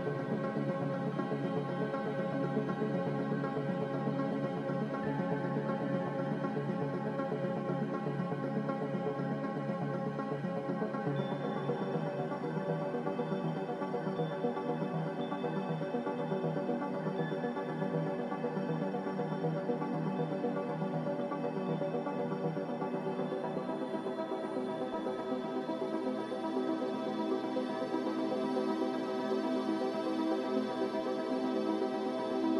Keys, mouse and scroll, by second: 10.4 typing, 10.7-12.5 Return, 20.5 Delete, 21.6 ctrl+z.